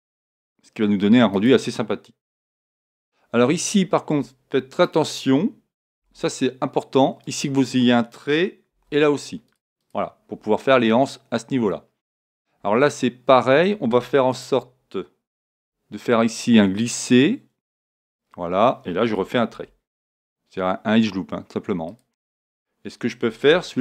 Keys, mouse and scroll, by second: 1.4-3.4 drag, 4.7-6.7 right drag, 6.0 g, 8.7 ctrl+r, 9.9-11.6 drag, 14.3-16.2 right drag, 15.4 g, 18.2-20.0 drag, 19.5 ctrl+r, 22.0-23.8 drag.